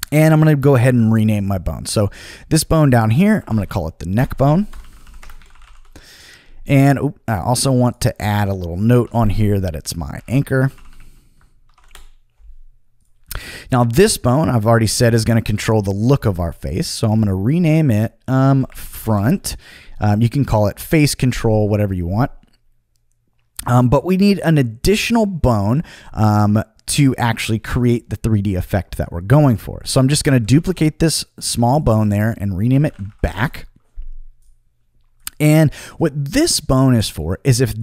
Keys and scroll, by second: 3.1-6.1 typing, 8.1-11.6 typing, 11.9 Return, 18.2-19.5 typing, 30.3 super+c, 30.5 super+v, 32.6-33.6 typing.